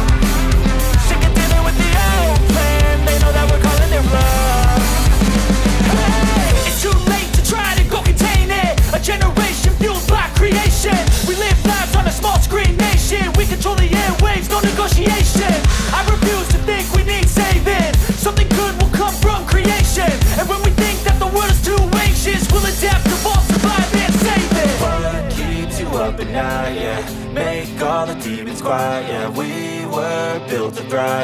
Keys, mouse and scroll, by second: 2.7 space, 18.2 space, 25.8 z, 28.5 z, 29.6 z.